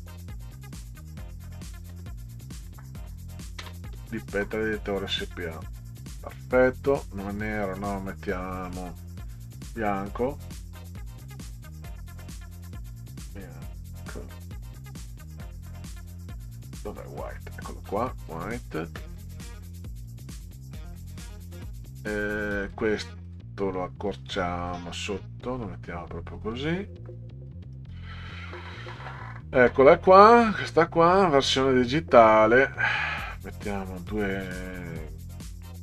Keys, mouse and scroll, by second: 0.0-2.6 typing, 7.7-9.2 drag, 11.3 click, 12.4 click, 15.6 scroll down 2, 16.4 scroll down 2, 17.3 click, 18.3 click, 22.6 click, 23.3 click, 24.7-26.3 drag, 27.9-28.9 scroll down 8, 30.5 click, 33.7-34.5 scroll up 6.